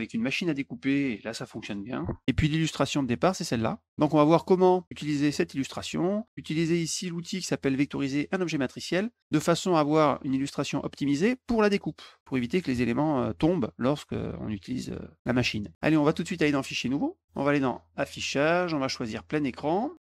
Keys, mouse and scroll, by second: 2.2 middle click, 3.0 click, 6.9 click, 8.4 click, 16.7 click, 17.9 click, 19.0 click, 19.9 click.